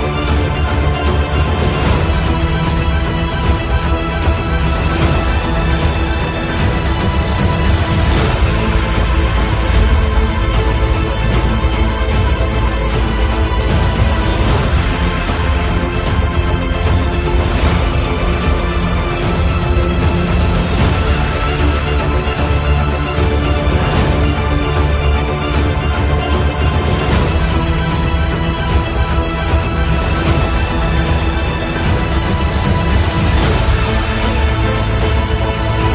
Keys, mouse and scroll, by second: 6.4 alt+click, 6.4 typing, 9.8-12.8 typing, 15.2 click, 16.8 ctrl+d, 22.4-27.8 drag, 27.8 click, 31.6 typing, 32.3 click.